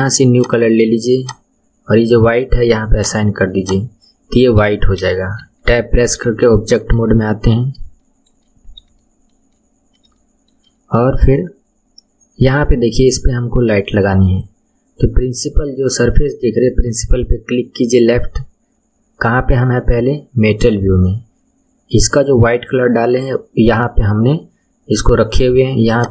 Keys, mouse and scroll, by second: 0.3-3.7 drag, 4.3-4.7 scroll down 2, 4.7 shift+middle click, 5.4 Tab, 5.9-6.5 scroll up 5, 6.5-7.6 shift+middle drag, 7.6-8.0 scroll up 2, 8.0-8.5 shift+middle drag, 8.5-9.0 scroll up 2, 9.0 shift+middle click, 9.7-10.1 scroll up 1, 10.1-11.6 shift+middle drag, 11.6 scroll down 2, 13.9-17.0 shift+middle drag, 19.3 scroll down 1, 19.3-22.3 scroll up 11, 25.9 click.